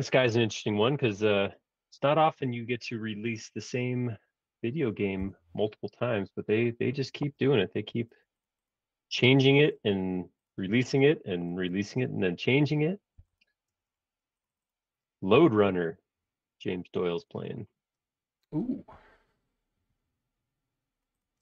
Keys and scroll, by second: 5.3 Return, 7.2 super+z, 7.9 b, 11.7 space, 11.9 Escape, 13.2 b, 13.7 space.